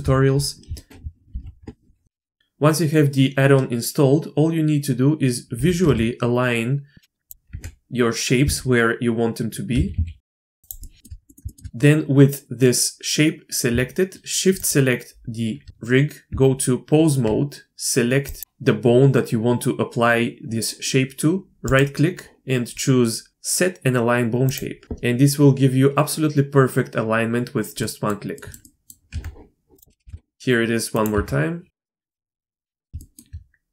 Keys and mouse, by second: 0.7 shift+middle click, 1.3 alt+h, 2.2 shift+middle drag, 2.4 g, 5.5 g, 7.5 Tab, 8.4 a, 9.7 s, 10.3 r, 10.8 shift+click, 11.3 click, 11.5 shift+click, 11.7 Tab, 16.3 Tab, 18.3 click, 27.8 middle click, 28.3 middle click, 28.6 middle click, 29.1 Tab, 29.7 drag, 30.0 g, 31.1 Tab, 31.7 a, 31.8 s, 32.2 r, 32.8 click, 33.0 shift+click.